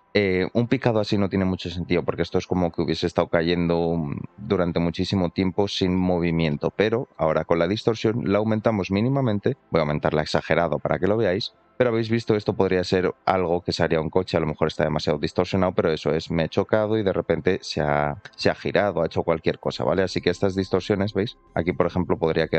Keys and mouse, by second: 1.0 middle click, 5.9 middle click, 6.5-6.8 shift+middle drag, 7.5 shift+click, 12.1 middle click, 13.4 middle click, 18.5 middle click, 19.4-20.6 middle drag, 20.7 alt+middle click, 21.4 middle click.